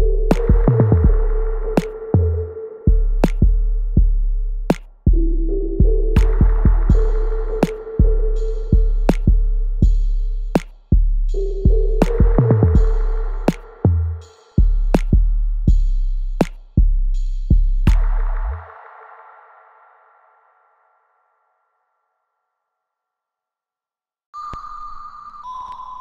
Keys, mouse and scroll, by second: 3.2-4.5 alt+right drag, 4.5 click, 5.1 alt+middle click, 6.0 r, 6.7 alt+middle click, 7.1 right click, 7.1 alt+right click, 7.9-10.5 alt+drag, 10.5-16.7 alt+drag, 16.7-20.9 alt+drag, 20.9 right click, 21.4 click, 21.7-23.6 alt+drag, 23.9 alt+right click, 24.4 alt+click, 25.5 alt+right click, 25.9-26.0 alt+drag.